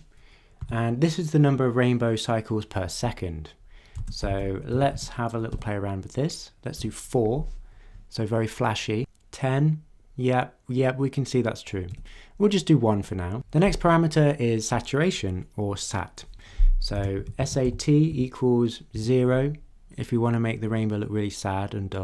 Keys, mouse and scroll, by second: 0.6 Left, 3.9-5.5 typing, 6.8 4, 8.8 0, 11.9 BackSpace, 16.9-18.9 typing.